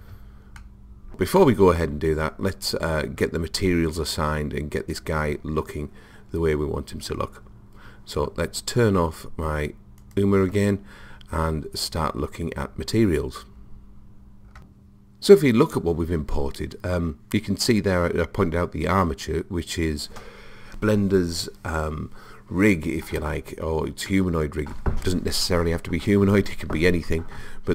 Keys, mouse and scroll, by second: 0.6 middle click, 1.4-3.3 middle drag, 10.1 click, 24.1-26.0 middle drag.